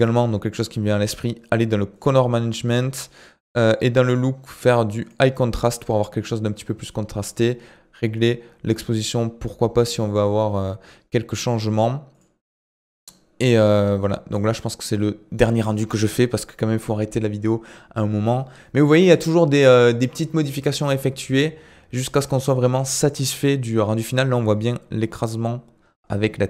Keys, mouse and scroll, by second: 0.0 click, 2.0 click, 2.4 scroll down 3, 3.6-6.6 drag, 7.5-10.5 drag, 11.7-15.0 drag.